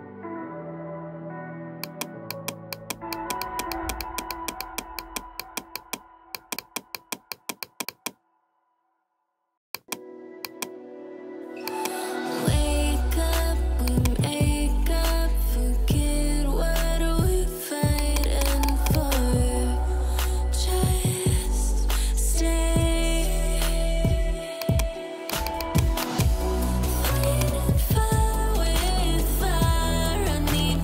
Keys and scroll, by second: 28.7 ].